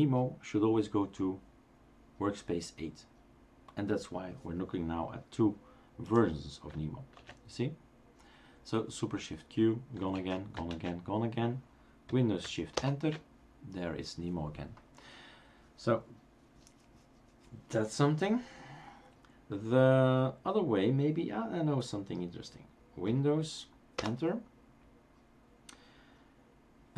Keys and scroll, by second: 7.2 shift+super+q, 10.3 shift+super+q, 10.7 shift+super+q, 12.9 shift+super+Return, 24.0 super+Return.